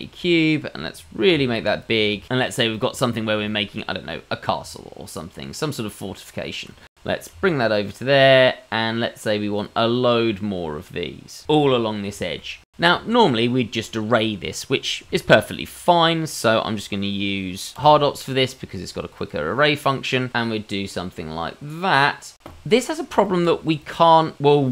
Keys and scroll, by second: 1.3 s, 3.3 g, 7.2 g, 10.0 g, 17.7 q.